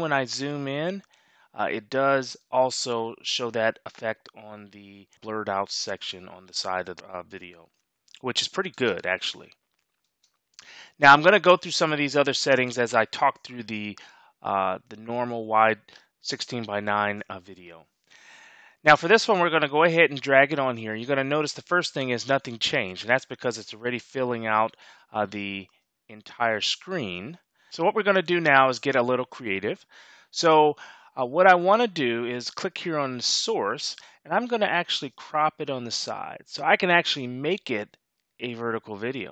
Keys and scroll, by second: 2.5 space, 8.7 space, 10.1 space.